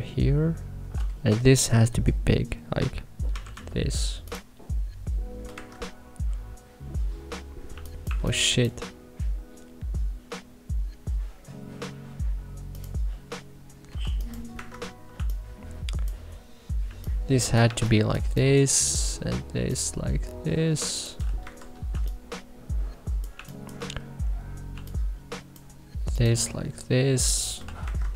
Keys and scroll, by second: 3.2 k, 5.4 Escape, 7.6 2, 8.0 1, 14.5 Escape, 15.0 2, 16.8 3, 17.5 1, 18.1 3, 21.4 Escape, 21.8 3, 23.2 1, 24.6 3, 27.7 Escape.